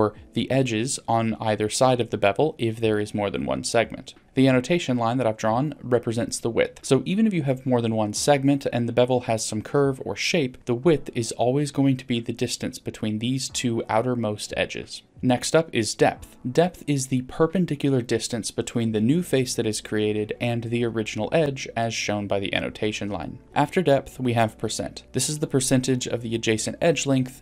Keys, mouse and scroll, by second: 2.7-4.2 drag, 14.4-15.1 drag, 15.1 right click, 15.1 d, 16.3-18.3 drag, 23.4-25.4 drag.